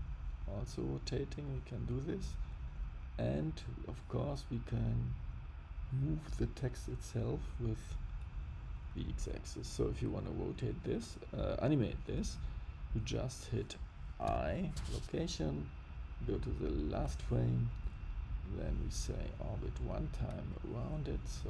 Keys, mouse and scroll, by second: 4.7 click, 5.5 click, 6.8 click, 10.9 click, 14.2 i, 16.2 click, 18.4 click, 20.4 click.